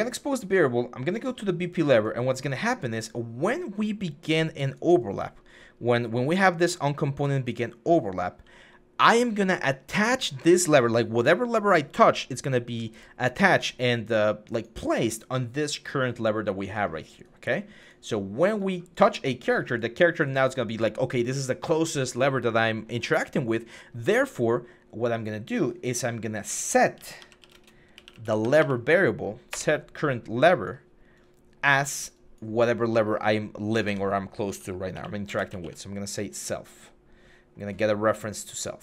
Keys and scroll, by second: 26.7-28.3 typing, 29.3 Return, 33.6 Tab, 34.3-35.7 typing.